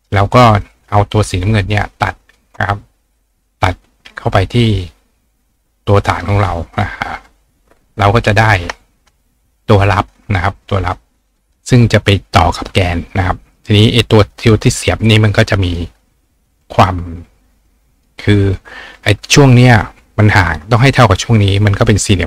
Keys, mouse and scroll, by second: 0.2-8.6 right drag, 2.2 shift+click, 6.1 click, 6.8 click, 7.6 ctrl+click, 15.6 click, 16.1-18.1 drag.